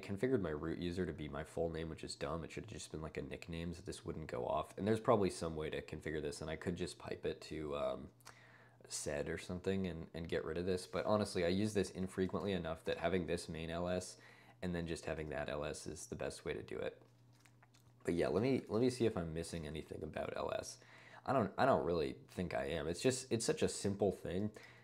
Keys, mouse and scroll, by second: 9.6 click, 10.6 click, 12.0-13.5 typing, 12.4 ctrl+u, 12.5 ctrl+l, 18.4-20.3 typing, 21.7 ctrl+d, 21.9 ctrl+d, 22.2 ctrl+d, 22.4 ctrl+d, 22.5 ctrl+d, 23.4 ctrl+d, 23.9 ctrl+d, 24.7 ctrl+d.